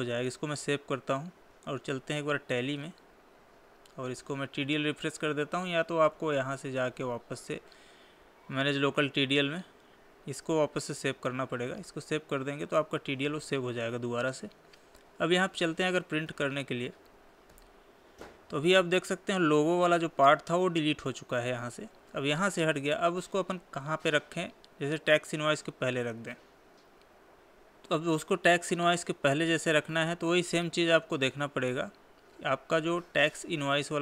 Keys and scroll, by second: 0.5 ctrl+s, 3.4 Escape, 10.8 ctrl+a, 12.2 Escape, 16.1 ctrl+p, 17.5 Left, 26.9 Escape, 33.9 Up.